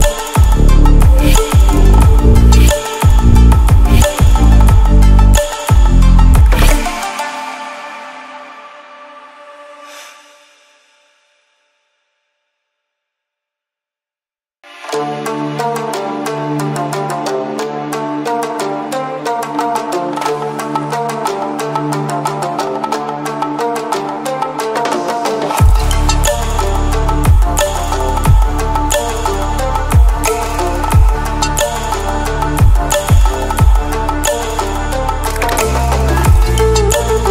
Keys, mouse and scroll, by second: 3.5-7.3 drag, 11.1 right click, 12.6 click, 13.7 right click, 13.7 right click, 14.9 click, 17.3 click, 22.2 click, 26.2 Down, 30.7 click, 30.9 Down, 33.7 click, 36.5-37.3 ctrl+alt+scroll down 3.